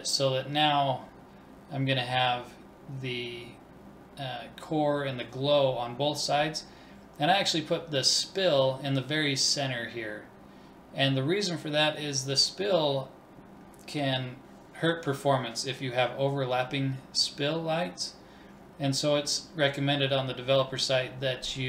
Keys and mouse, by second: 0.2 middle click, 0.8 click, 1.1 KP_1, 1.3 middle click, 1.5 click, 2.2-6.1 middle drag, 6.1-7.7 drag, 7.4 BackSpace, 11.3-13.2 drag, 14.0-15.9 middle drag, 15.3 ctrl+s, 18.1-20.7 drag.